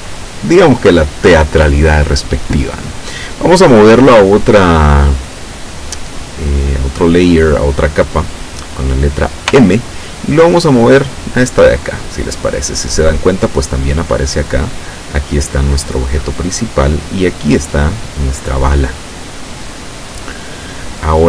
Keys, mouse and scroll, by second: 9.6 m, 11.8 click, 15.8 click, 17.8 click.